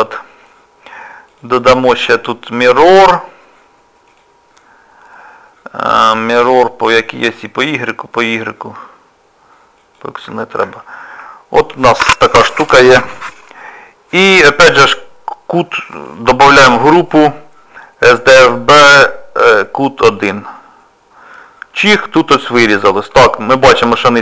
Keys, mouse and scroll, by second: 1.3 click, 1.7 click, 6.0 middle click, 8.2 click, 9.8 click, 10.4 shift+middle click, 10.8 middle click, 11.7 click, 14.2 middle click, 16.5 m, 21.4 middle click, 23.6 scroll up 1, 24.1 middle click, 24.1 scroll up 2.